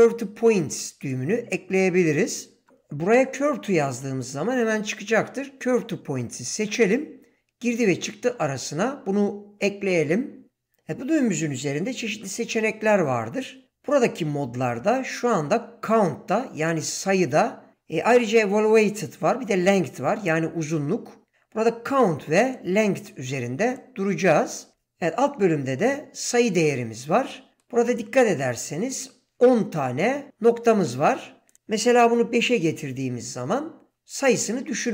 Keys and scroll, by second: 31.9 5, 32.3 Return.